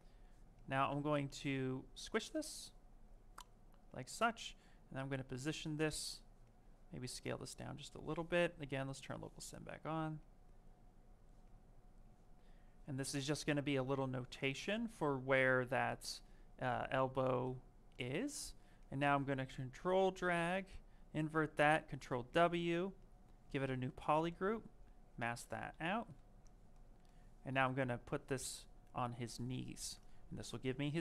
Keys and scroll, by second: 7.9 ctrl+z, 14.6 w.